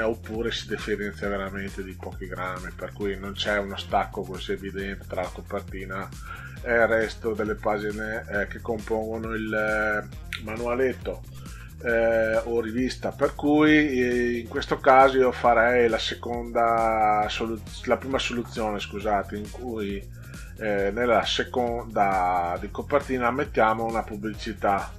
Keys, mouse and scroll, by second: 9.4-9.8 drag, 10.0 scroll down 2, 12.7 scroll down 2, 13.6 scroll up 2, 14.2 scroll up 2, 22.7 click.